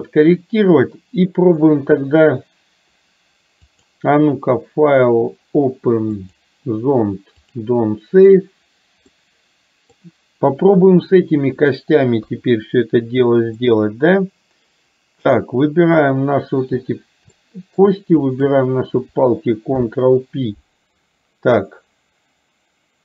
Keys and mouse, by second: 3.8-8.1 drag, 9.2 middle click, 12.3 KP_3, 13.7-15.3 middle drag, 17.4 middle click, 18.3 shift+click, 19.8 ctrl+p.